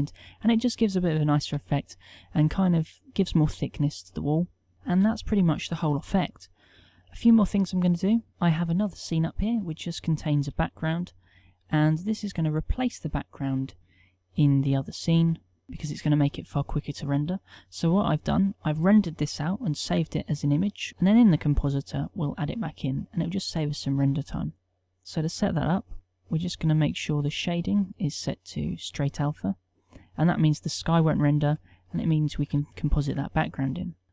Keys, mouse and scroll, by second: 10.7-16.2 middle drag, 22.9-24.0 drag.